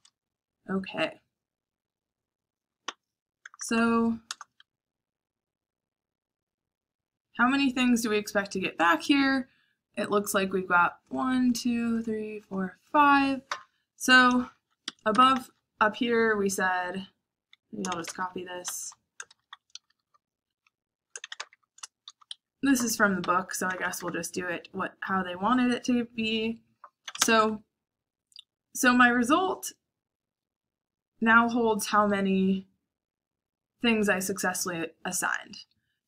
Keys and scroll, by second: 0.0-0.8 typing, 2.8 o, 3.3 BackSpace, 3.5 BackSpace, 3.7 BackSpace, 4.2 Return, 14.8 Escape, 15.0-24.5 typing, 22.2 Escape, 26.8-27.6 typing.